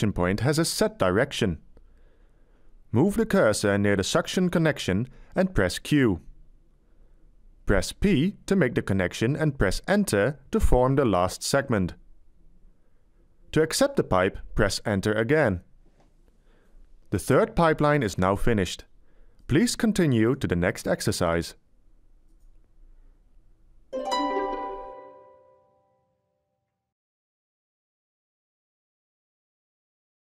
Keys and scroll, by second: 7.7 q, 10.0 p, 12.4 Return, 16.1 Return.